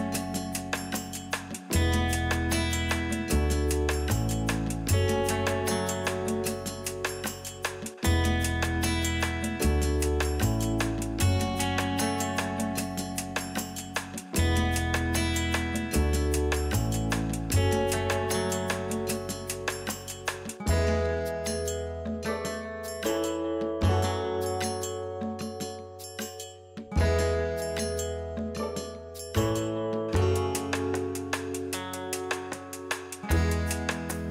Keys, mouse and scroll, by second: 0.0 click, 0.1-1.9 middle drag, 0.4 scroll down 1, 0.6 scroll up 1, 0.7-1.2 scroll down 1, 1.3 scroll up 1, 1.9 click, 2.7 middle click, 3.1 middle click, 3.4 shift+click, 3.5 scroll down 1, 3.6-4.1 middle drag, 4.1 g, 4.9 click, 5.0 middle click, 5.3 Tab, 5.9 click, 6.4 x, 6.8 middle click, 7.1 click, 7.4 middle click, 8.0-8.3 scroll up 2, 8.3 click, 9.1-13.1 middle drag, 9.5 scroll up 1, 9.9 shift+click, 10.2 x, 10.9-11.5 scroll down 2, 11.5 click, 11.6-12.1 scroll up 2, 12.1 scroll down 1, 13.1 click, 14.2 scroll down 1, 14.3-16.1 middle drag, 14.7 g, 16.1 click, 16.2-18.4 middle drag, 16.6-17.0 scroll up 1, 17.3 scroll up 1, 17.6 g, 18.4 click, 18.4-20.0 middle drag, 18.6-19.2 scroll down 4, 19.0 click, 19.7 scroll up 2, 20.0 click, 20.2 middle click, 20.9 click, 21.2 shift+click, 21.3-21.6 middle drag, 21.6 click, 21.8 shift+click, 21.9-23.0 middle drag, 22.4 g, 23.0 click, 23.0-23.7 middle drag, 23.7 click, 23.7 scroll down 1, 24.0-27.0 middle drag, 24.1 scroll up 2, 26.1 scroll up 2, 26.4 scroll down 2, 26.7 scroll up 2, 27.5 click, 27.9 KP_3, 28.4 g, 29.5 click, 29.7 middle click, 30.0 click, 30.1 scroll down 2, 30.2-31.2 middle drag, 30.9 scroll up 2, 31.2 scroll down 2, 31.3 middle click, 31.8 scroll up 2, 31.9-32.4 scroll down 4, 32.0 middle click, 32.6 click, 32.7-34.3 middle drag, 32.7 scroll up 2, 33.7 scroll up 2, 33.8 scroll down 2.